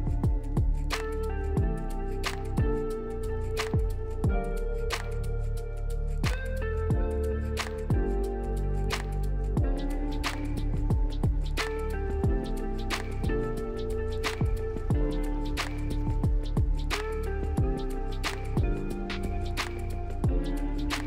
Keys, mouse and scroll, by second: 13.6 double click.